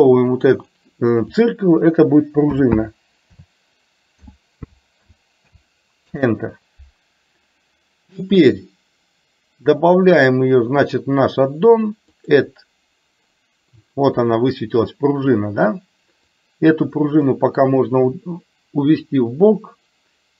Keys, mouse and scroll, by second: 0.4-6.3 drag, 10.3-12.8 drag, 16.5 click.